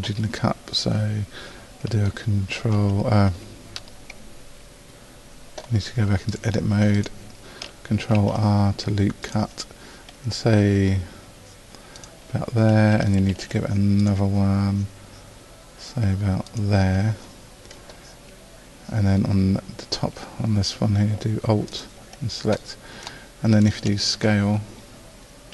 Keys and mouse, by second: 2.6 ctrl+r, 7.2 middle click, 8.2 ctrl+r, 13.3 ctrl+r, 21.7-23.1 right drag, 23.1 middle click, 23.7-25.5 middle drag.